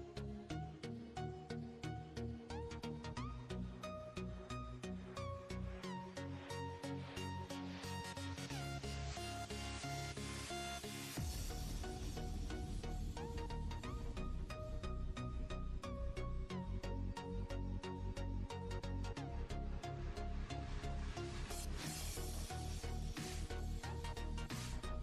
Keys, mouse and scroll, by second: 0.0 click, 0.7-1.5 scroll down 10, 1.5-2.1 scroll up 6, 2.9-4.0 drag, 4.0-5.8 scroll up 1, 5.8 click, 8.2 Tab, 9.7 s, 10.8 click, 11.1 Tab, 11.8 click, 12.6 Tab, 13.1 click, 14.0 click, 14.6 scroll down 1, 15.3-16.8 scroll up 4, 16.8 click, 17.9 Tab, 19.6 click, 20.6 click, 21.5 click, 22.7 Tab, 24.2 click.